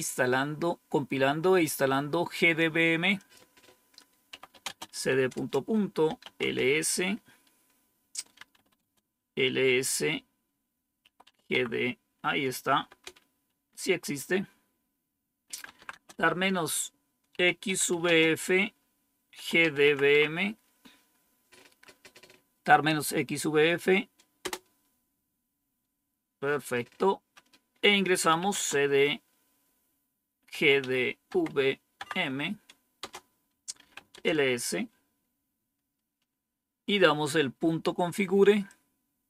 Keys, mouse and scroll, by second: 3.1 click, 3.5 click, 4.0-6.7 typing, 8.1-9.0 typing, 10.7-11.7 typing, 12.8 typing, 15.1-20.0 typing, 24.3 Return, 27.9-28.8 typing, 30.2-31.7 typing, 31.9 Tab, 32.9 Return, 33.5-34.2 typing, 38.6-39.2 drag.